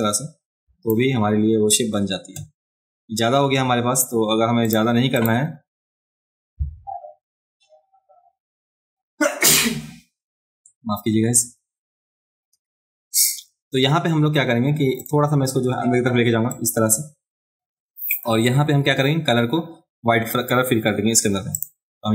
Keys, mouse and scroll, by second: 4.7 click, 5.2 click, 16.5-18.2 drag, 21.5 click.